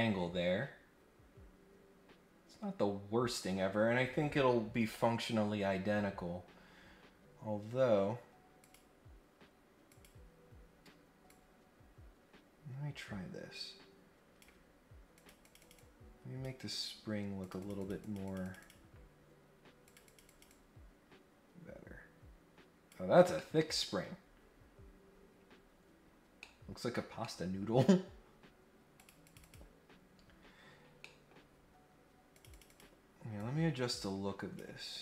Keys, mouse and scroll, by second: 5.7-6.1 scroll up 1, 6.3 scroll down 1, 8.6 click, 9.9 click, 11.3-14.4 drag, 15.1 click, 15.4 click, 15.7 click, 17.4 click, 17.6 click, 17.8 click, 18.0 click, 18.2 click, 18.4 click, 18.6 click, 19.8 click, 20.0 click, 20.3-22.9 drag, 23.4 middle click, 24.3 scroll down 1, 24.6-25.7 scroll up 3, 25.9 scroll down 1, 26.4 middle click, 27.2 middle click, 28.9 click, 29.2 click, 29.4 click, 30.3 scroll down 1, 30.8 scroll up 1, 31.0 middle click, 32.3 click, 32.5 click, 33.4-34.6 drag.